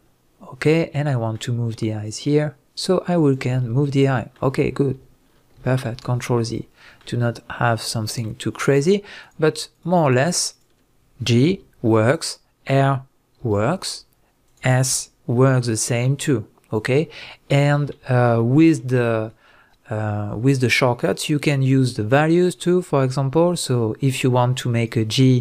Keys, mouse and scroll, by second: 0.0 scroll down 1, 1.1-2.1 middle drag, 2.1-3.8 drag, 3.5-3.8 scroll down 1, 3.8-9.2 middle drag, 5.6 ctrl+z, 6.0-6.5 scroll up 1, 6.5-6.8 scroll down 1, 7.6-7.9 scroll down 1, 8.6 scroll up 1, 9.2 click, 9.7 shift+click, 10.0 shift+drag, 10.5 shift+drag, 11.5 g, 12.2 right click, 12.7-13.4 scroll down 1, 13.4 r, 14.5 right click, 14.9 s, 16.8 right click, 17.1-17.6 scroll down 1, 17.6-18.4 scroll up 1, 18.4-23.0 shift+middle drag, 23.0 drag, 23.6 click, 24.8 shift+click, 25.3 shift+drag.